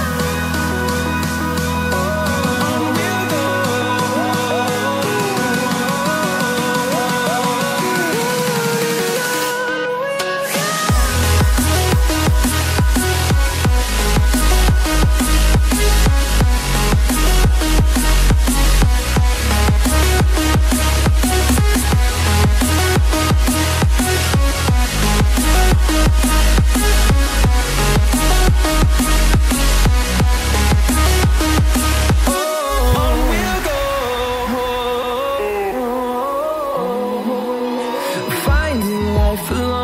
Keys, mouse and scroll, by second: 0.2-3.9 typing, 5.3 typing, 7.1 click, 8.5 double click, 9.0 click, 10.0 scroll up 1, 10.4 click, 10.7 double click, 11.5 click, 15.1 ctrl+z, 15.3 click, 22.0 double click, 23.3 scroll down 1, 24.5 click, 27.7 click, 32.6 scroll up 1, 33.2 click, 36.7 ctrl+c, 36.9 ctrl+v, 38.6 click, 39.0 ctrl+double click.